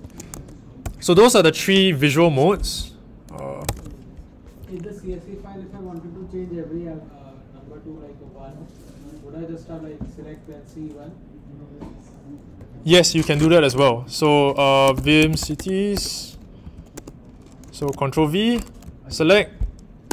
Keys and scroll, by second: 0.0-0.7 typing, 3.6 super+Tab, 13.5 super+Tab, 14.5-20.1 typing, 17.8 ctrl+v.